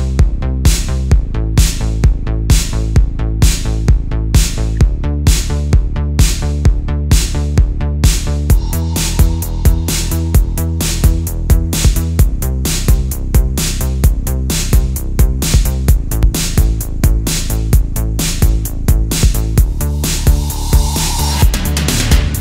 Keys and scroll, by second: 0.1 space, 0.7 super+space, 1.5 super+z, 3.3 super+z, 4.2 space, 4.8 super+space, 5.4 space, 6.5 super+z, 7.5 super+z, 8.4 super+z, 9.5 super+z, 10.5 super+z, 10.9 super+z, 13.2 space, 14.2 super+z, 16.0 super+z, 17.5 space, 18.0 super+space, 18.2 super+space, 19.0 super+z, 21.1 super+z, 21.8 space.